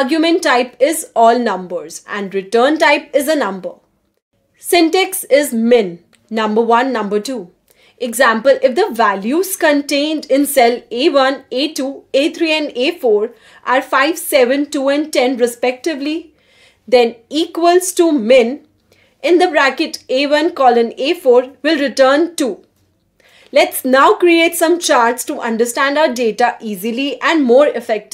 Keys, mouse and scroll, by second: 19.8 shift+n, 20.0 Return, 20.7 Return, 22.9 click, 26.8-28.1 drag.